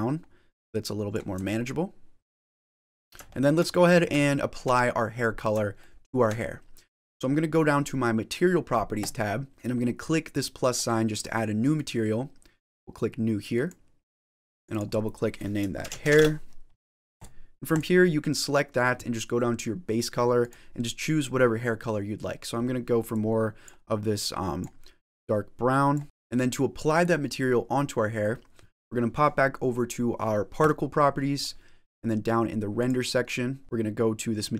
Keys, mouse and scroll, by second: 1.4 shift+middle click, 2.3 middle click, 3.2 shift+middle click, 3.6-4.0 scroll up 5, 4.6 shift+middle click, 4.8 middle click, 5.7 shift+middle click, 6.4-6.8 scroll down 1, 8.9 click, 11.6 click, 13.4 click, 14.5 click, 15.4 click, 17.6 click, 20.3 click, 26.0 click, 26.0 middle click, 30.4 click, 32.7 click, 33.5-34.5 scroll down 6.